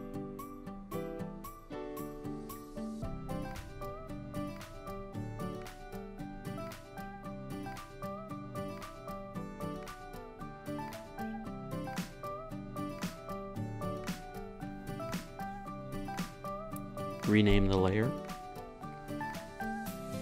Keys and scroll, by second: 2.2 Up, 3.5 Down, 7.7 super+s, 13.0 Down, 14.1 Down, 16.2 Right, 16.5 BackSpace, 16.7 Return.